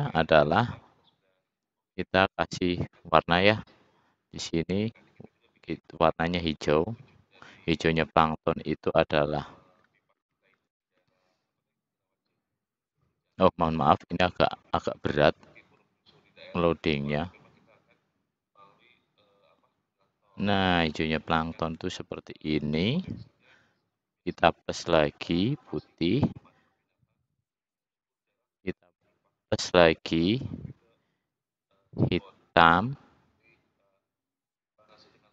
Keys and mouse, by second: 3.9-6.8 middle drag, 31.6-33.0 drag.